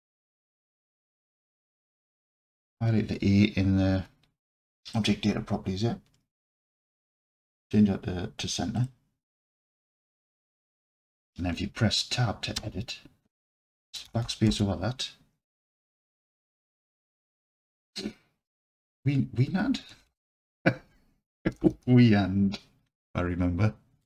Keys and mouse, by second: 4.9 click, 7.6-8.9 drag, 12.6 Tab, 13.9 BackSpace, 14.0 BackSpace, 14.2 BackSpace, 14.5 BackSpace, 16.0-17.4 typing, 19.9-21.7 typing.